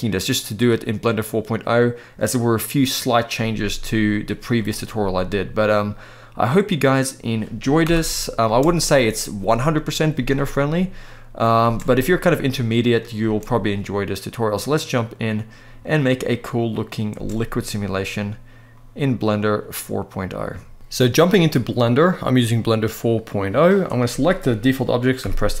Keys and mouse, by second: 3.8-4.3 middle drag, 6.4 middle click, 7.5 shift+Left, 8.1 space, 11.3 space, 11.5-12.2 middle drag, 12.9 space, 14.5-15.9 middle drag, 16.4 middle click, 16.9 space, 17.2-17.6 middle drag, 18.4-18.8 middle drag, 20.2 shift+middle click, 21.2-23.5 drag, 25.0 Delete.